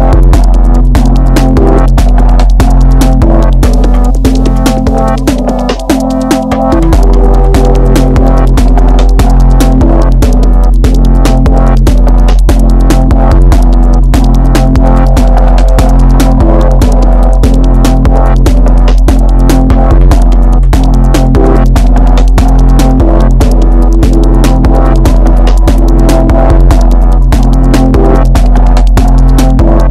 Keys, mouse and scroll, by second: 1.7 middle click, 2.3 KP_1, 3.2 click, 4.6 middle click, 5.6 scroll up 1, 5.8-7.2 middle drag, 7.2 click, 8.1 KP_1, 9.1 click, 11.3-12.2 middle drag, 12.2 scroll up 1, 12.3-13.5 middle drag, 13.5 Tab, 13.7-15.1 middle drag, 15.1 click, 15.4-17.8 middle drag, 17.8 ctrl+shift+click, 18.7-20.0 middle drag, 20.0 click, 21.8 middle click, 22.4 KP_1, 23.3-23.7 scroll down 2, 23.7 shift+middle click, 24.2 alt+z, 25.1 click, 26.0 alt+z, 26.4-26.8 alt+scroll down 1, 26.8 alt+z, 27.2-29.2 middle drag, 29.2 Tab, 29.6-29.9 scroll down 4, 29.6-29.9 middle drag.